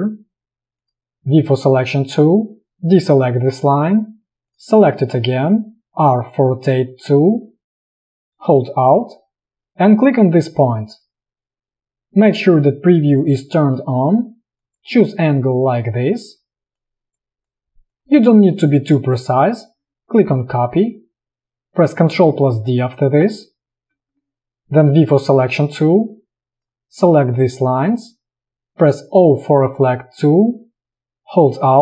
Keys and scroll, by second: 1.6 v, 6.1 r, 7.7 space, 22.7 ctrl+d, 24.0 v, 29.3 o.